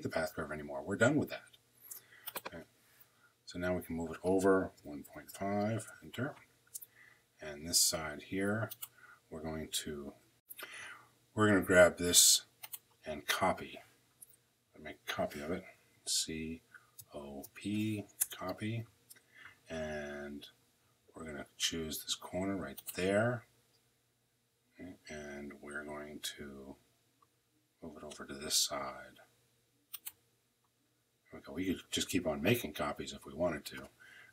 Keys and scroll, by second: 4.2-5.5 typing.